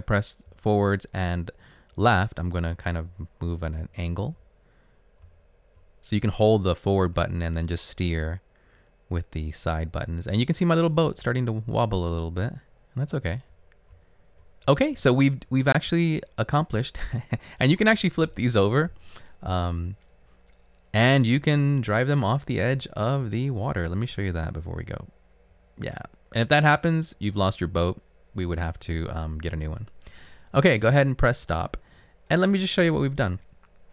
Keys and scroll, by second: 0.0 Up, 0.5 Left, 1.0 typing, 1.2 Left, 4.3 Left, 4.3 Up, 5.0 Up, 5.8 Left, 7.4 Left, 9.9 Right, 10.9 Up, 11.1 Left, 11.8 Left, 12.5 Left, 13.3 Left, 13.6 Up, 15.0 Left, 15.0 Right, 19.9 Left, 21.6 Right, 21.6 Up, 22.5 Right, 23.6 Right.